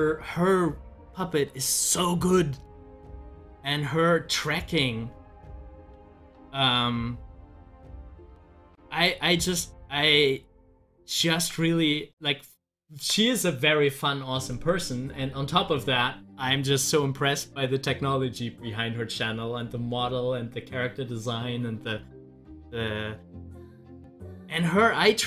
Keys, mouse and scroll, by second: 3.9 scroll up 1, 5.7 ctrl+z, 8.6 ctrl+z, 11.4 z, 12.0-14.9 drag, 23.8 scroll down 1.